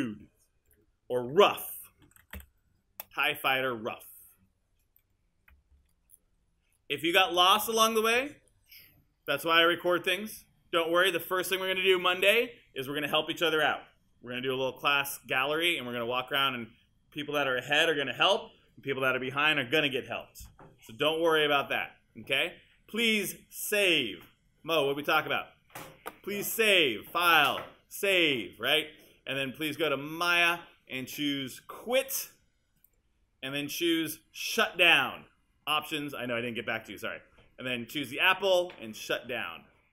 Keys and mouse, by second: 1.4-2.9 typing, 5.0 click, 6.9 click, 8.2 right click.